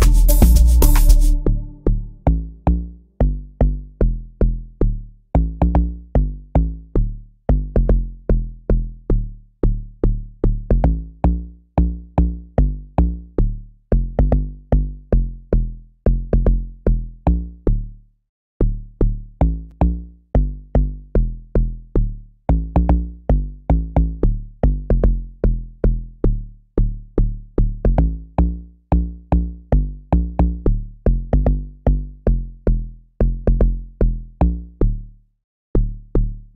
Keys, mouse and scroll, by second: 28.8 F1, 30.1 F1, 30.8 F5, 32.3 F1.